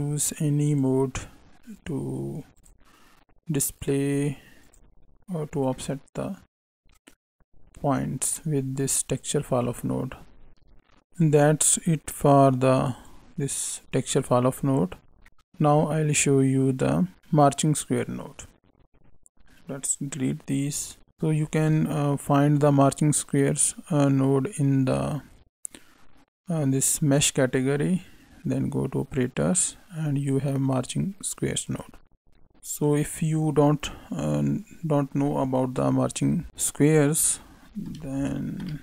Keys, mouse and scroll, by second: 1.7 click, 3.7 click, 5.7 middle click, 10.7 right click, 11.2 right click, 15.6 right click, 21.4 shift+a, 32.3 middle click, 32.3 scroll up 3.